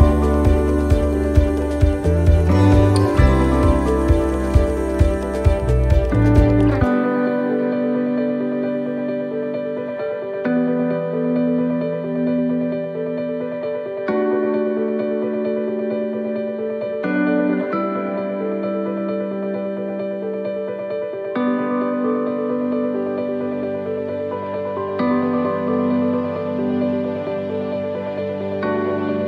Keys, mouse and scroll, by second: 0.5 middle click, 11.2 ctrl+r, 13.5-14.2 scroll up 1, 14.2 scroll up 2, 14.5 right click, 15.8 alt+shift+right click, 16.6 alt+shift+right click, 18.2 e, 22.2 click, 23.3 middle click, 25.1 s.